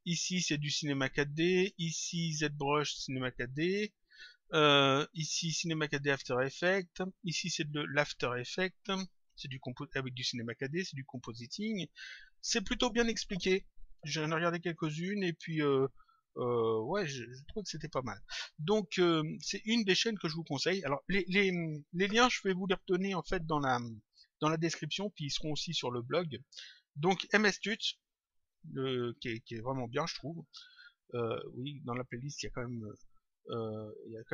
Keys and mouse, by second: 31.1 click.